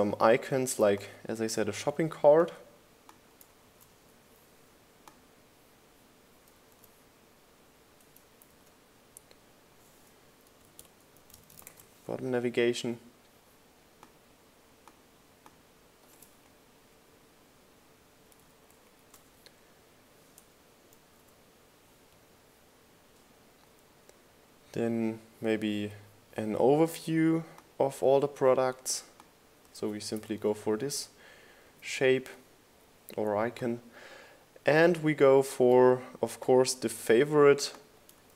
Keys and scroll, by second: 2.7 super+c, 5.9 super+v, 7.5 super+g, 9.6-11.1 typing, 11.7 Return, 17.7 shift+Down, 29.4 super+c, 31.0 super+v, 37.9 super+c.